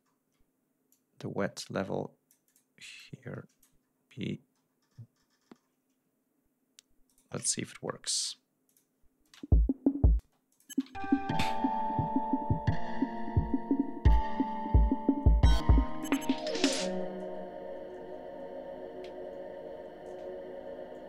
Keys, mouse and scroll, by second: 0.1 ctrl+scroll up 2, 0.9-2.8 drag, 3.0 click, 3.9-4.5 ctrl+scroll down 2, 7.1 shift+right click, 7.6 ctrl+shift+scroll up 3, 8.7 click, 9.3 space, 10.3 space, 10.5 click, 11.0 ctrl+scroll down 2, 11.3 ctrl+scroll up 2, 14.1-16.3 drag, 18.2 ctrl+scroll down 2, 18.6 ctrl+scroll up 2, 20.4 ctrl+scroll up 2.